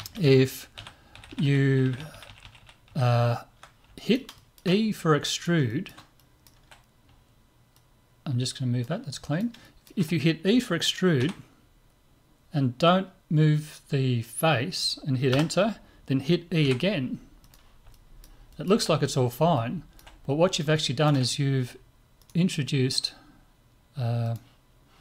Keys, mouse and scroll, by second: 0.2 ctrl+z, 0.8-2.4 ctrl+z, 2.8 ctrl+z, 2.9 ctrl+z, 3.1 ctrl+z, 4.0-8.0 middle drag, 7.7-9.5 drag, 9.2-11.5 middle drag, 11.2 e, 16.6 e, 17.9-22.7 middle drag, 22.2 click, 22.7 right click, 24.2-25.0 drag.